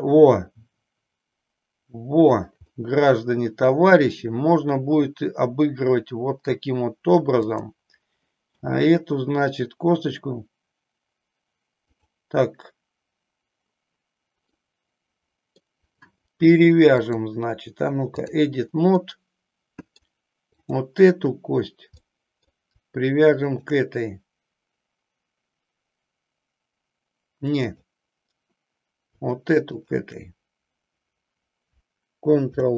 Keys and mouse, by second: 2.7-6.6 middle drag, 7.4-9.1 drag, 9.1 g, 14.5-15.6 middle drag, 17.0 click, 19.0-20.0 middle drag, 20.6 click, 22.1 middle click, 23.5 shift+click, 27.7 click, 29.7 shift+click, 32.4 ctrl+p.